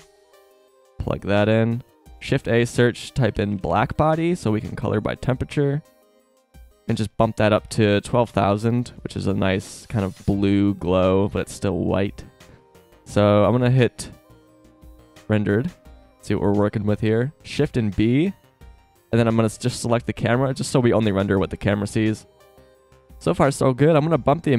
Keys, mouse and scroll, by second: 1.3 click, 1.9 shift+a, 5.6-6.1 drag, 8.3 KP_0, 10.9-11.7 right drag, 17.6 shift+b, 24.1 click.